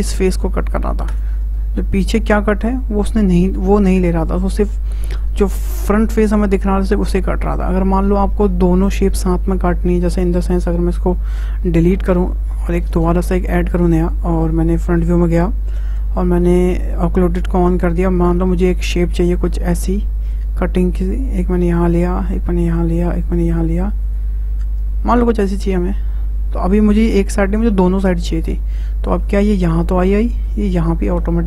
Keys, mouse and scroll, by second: 1.6-4.6 middle drag, 4.6 `, 10.7 `, 11.3 Tab, 13.0 shift+a, 14.1 `, 15.8 Tab, 17.3 click, 18.9-22.0 drag, 28.4-31.4 middle drag.